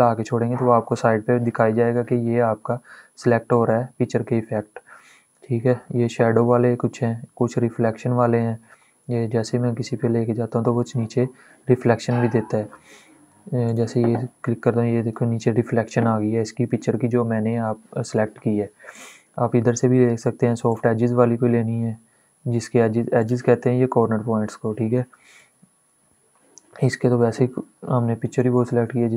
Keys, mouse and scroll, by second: 13.4 click, 18.7 click, 20.4 click, 23.2 click, 25.1 ctrl+z, 27.9 click.